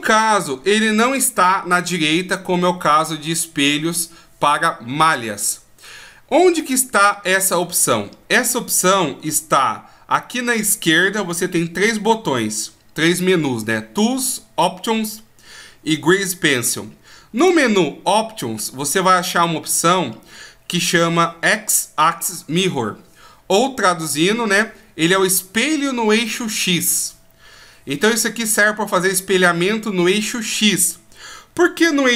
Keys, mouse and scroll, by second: 17.4 click.